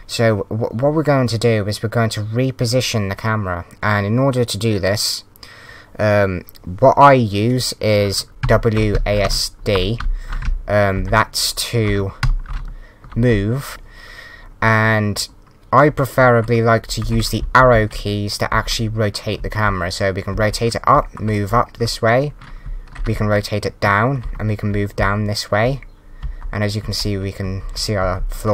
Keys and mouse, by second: 8.4 w, 9.2 s, 12.2 d, 14.4 w, 17.0 Up, 17.4 Left, 18.5 Up, 22.7 s, 23.1 Down, 24.4 w, 26.0 Up, 26.8 Down, 27.0 Right, 27.7 Down, 28.0 Up, 28.1 Left.